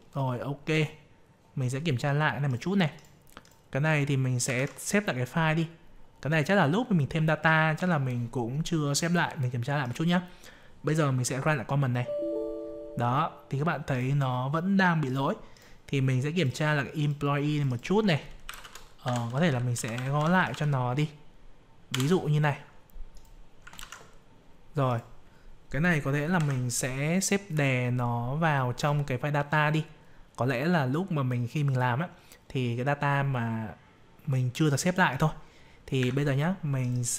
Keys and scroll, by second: 4.4 ctrl+s, 23.7 ctrl+s, 26.3 F12.